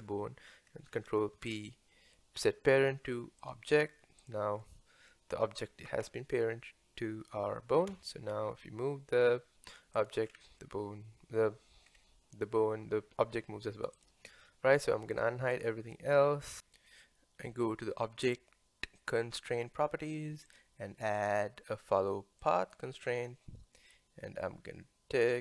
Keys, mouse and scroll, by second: 1.4 ctrl+p, 4.2 click, 4.6-7.9 middle drag, 7.9 g, 10.3-10.6 scroll down 3, 10.6-11.9 middle drag, 11.9-12.3 scroll down 2, 12.3-13.6 middle drag, 13.6 g, 15.1 click, 15.5 click, 16.1 scroll down 1, 16.5 middle click, 19.4 click, 20.5-23.3 drag, 23.3-25.4 middle drag.